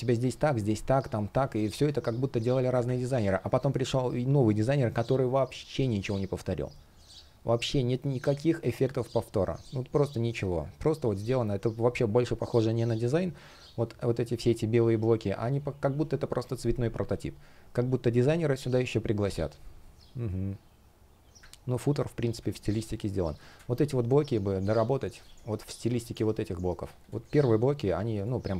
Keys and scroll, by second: 1.1 space, 2.9 space, 24.9 space.